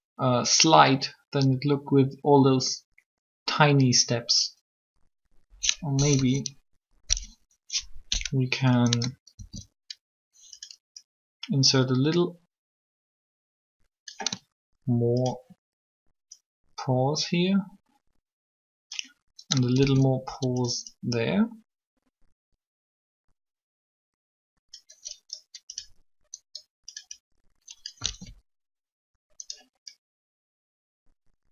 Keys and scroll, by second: 6.0 3, 9.4 shift+d, 19.8 shift+d, 28.0 alt+a.